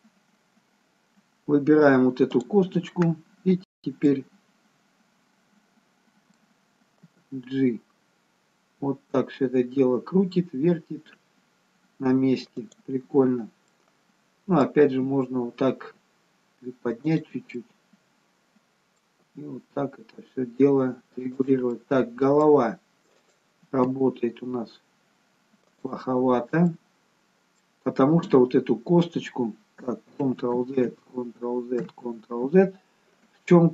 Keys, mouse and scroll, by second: 1.0-2.2 scroll up 1, 2.4 click, 4.1 middle click, 7.1 g, 13.6 middle click, 14.9 g, 17.7 middle click, 19.3 g, 21.9 middle click, 23.2 click, 23.7 g, 26.1-26.5 scroll up 2, 26.7 middle click, 30.4 ctrl+z, 31.0 ctrl+z.